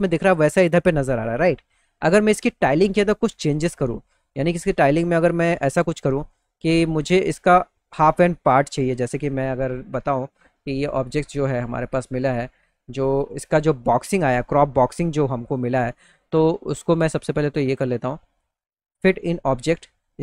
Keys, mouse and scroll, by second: 1.9 middle click, 2.4-3.9 middle drag, 6.3 click, 8.9 click, 10.2 click, 16.8 click.